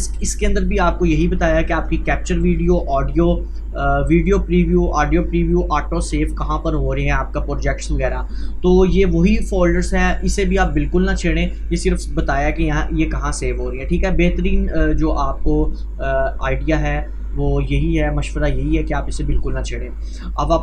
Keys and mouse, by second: 20.2 click.